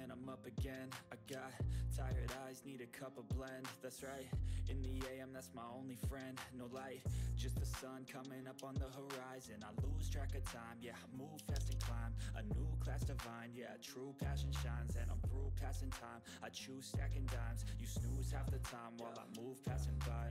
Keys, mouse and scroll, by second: 0.6 click, 1.0-1.6 ctrl+scroll down 1, 1.6 click, 2.4 ctrl+scroll up 1, 2.8 click, 3.9-6.6 drag, 6.6 click, 8.6-9.3 ctrl+scroll up 1, 9.3 right click, 9.8 click, 11.4 ctrl+z, 11.4 typing, 12.0 click, 12.1 right click, 12.4 click, 12.8 right click, 13.2-19.3 drag, 19.3-19.7 ctrl+scroll down 1, 20.2 ctrl+scroll up 1.